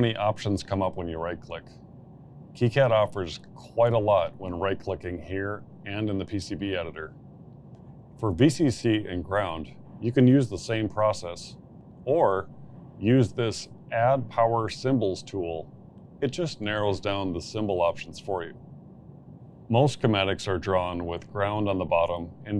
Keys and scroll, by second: 17.8 v, 18.1 c, 18.3 c, 19.4 Return.